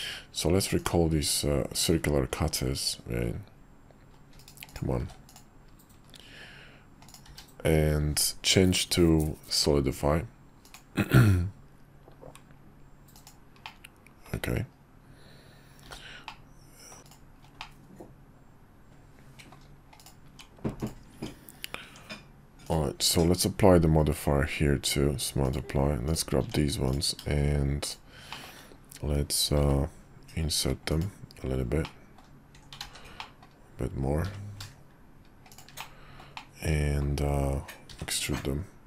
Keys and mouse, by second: 4.7 click, 5.0 q, 7.2 q, 13.6-14.3 middle drag, 15.8 h, 16.2-17.0 middle drag, 17.0 Tab, 17.0 /, 17.1-17.6 drag, 17.6-19.5 middle drag, 20.0-20.3 drag, 20.3 Tab, 20.8 click, 21.1 Tab, 21.9 Tab, 22.7 click, 23.0 q, 26.4 Tab, 26.8 click, 27.8 shift+click, 28.3 shift+middle click, 30.9 i, 31.8 middle click, 32.8 ctrl+z, 33.2 middle click, 34.2 i, 35.8 middle click, 36.3 middle click, 37.9 e.